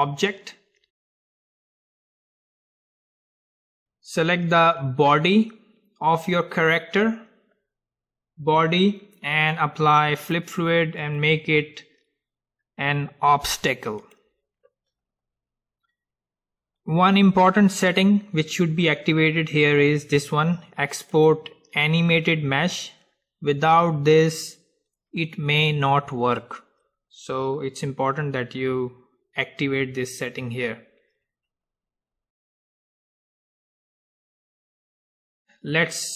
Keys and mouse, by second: 2.3-3.8 middle drag, 3.8-6.6 drag, 6.6-8.6 middle drag, 10.3-13.6 drag, 21.3-26.4 drag, 31.8-35.0 middle drag.